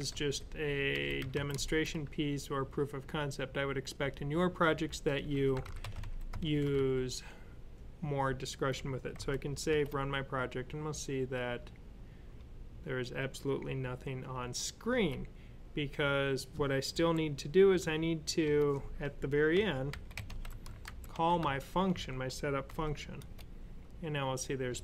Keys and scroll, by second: 0.0-1.5 typing, 4.9-6.6 typing, 9.0 super+s, 14.8 w, 16.8 typing, 19.1-21.3 typing, 22.5 super+s.